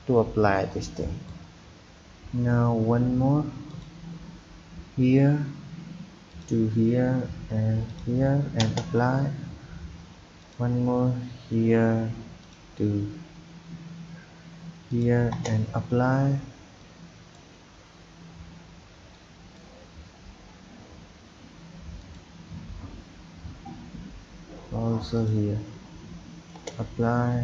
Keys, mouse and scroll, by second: 0.7-6.8 drag, 10.4-13.5 drag, 16.8-25.1 drag.